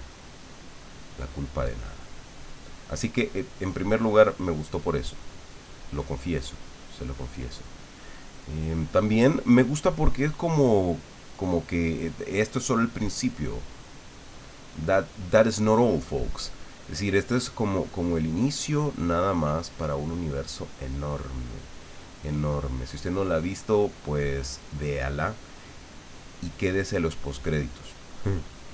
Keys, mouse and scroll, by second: 5.3-22.3 drag, 22.5-27.1 drag.